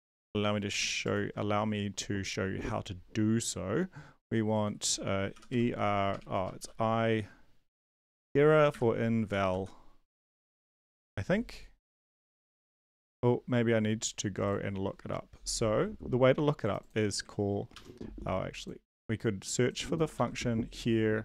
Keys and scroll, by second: 5.1-6.6 typing, 7.9-11.0 typing, 17.7 ctrl+c, 20.1 ctrl+v.